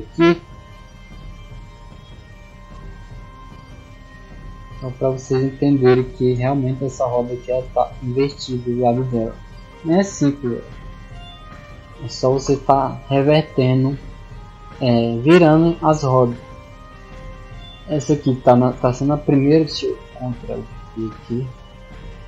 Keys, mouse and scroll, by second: 0.7 click, 2.4-3.0 drag, 3.1 s, 3.8 click, 4.4-5.0 drag, 6.0 shift+right click, 7.6 click, 8.3 right click, 10.0 click, 10.7 click, 11.1 click, 12.9-14.4 typing, 20.2 click, 21.0-22.0 drag.